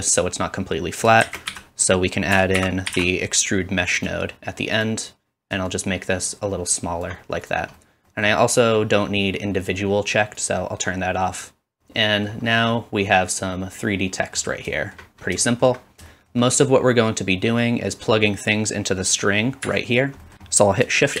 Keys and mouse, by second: 1.2 shift+a, 5.7 shift+middle click, 5.7 shift+right click, 7.5-21.2 drag, 10.4 middle click, 10.4 right click.